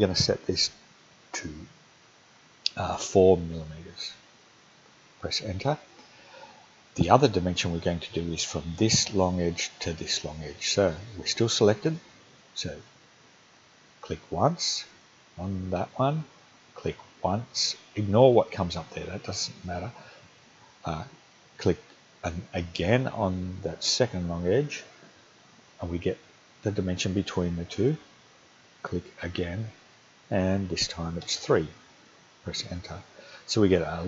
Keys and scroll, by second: 3.0 4, 4.5 Return, 31.2 3, 32.5 Return.